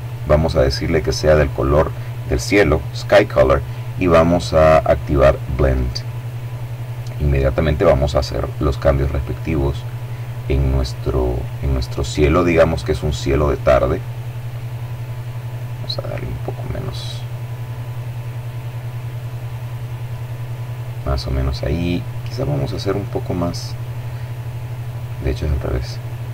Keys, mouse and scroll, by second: 0.9 click, 4.4 click, 7.9 click, 9.2 click, 10.6 click, 11.5 click, 13.9 click, 15.1 click, 16.2-19.1 drag, 19.4 click, 21.5 click, 24.2 click, 25.6 click.